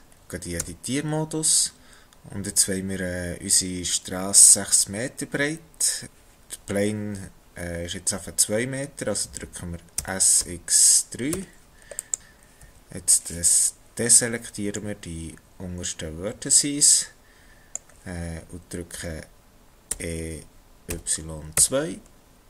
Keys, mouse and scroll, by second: 0.0 scroll down 1, 0.1 shift+middle click, 0.6 Tab, 10.0 s, 12.6 b, 16.6 shift+middle click, 19.9 e.